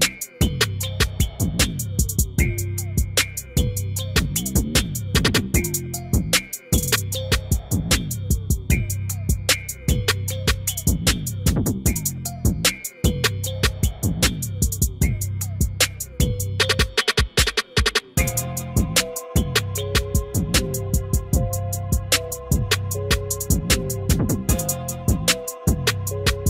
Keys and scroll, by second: 12.8 ctrl+z, 23.0 ctrl+z.